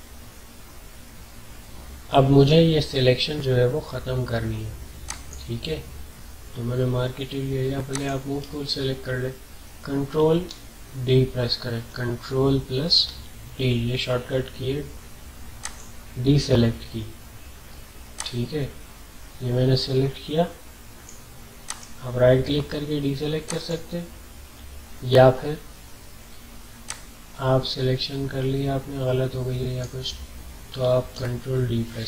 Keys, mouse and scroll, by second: 5.1 click, 7.9 click, 10.4 ctrl+d, 13.0 ctrl+d, 15.6 click, 18.1-21.6 drag, 21.6 right click, 23.5 click, 26.8-31.4 drag, 31.4 ctrl+d.